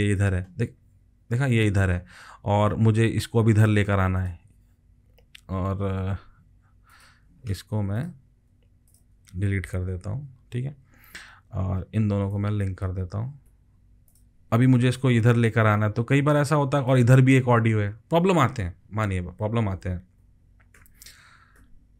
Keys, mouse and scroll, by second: 8.9 alt+click, 9.9 Delete, 13.5 ctrl+l, 19.8 ctrl+z, 20.2 ctrl+z, 20.7 ctrl+z, 21.6 ctrl+z.